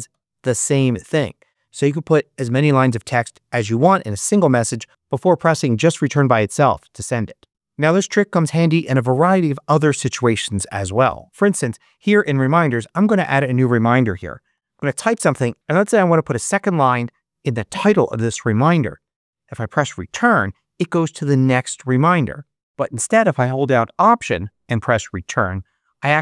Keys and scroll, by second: 13.8-14.8 typing, 20.0 Return, 21.9 super+z, 25.2 alt+Return.